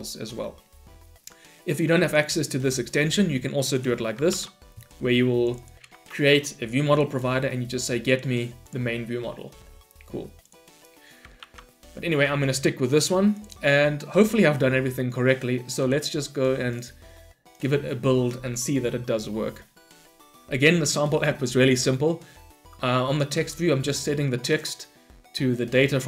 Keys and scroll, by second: 2.0 Delete, 4.3 ctrl+/, 11.4 ctrl+/.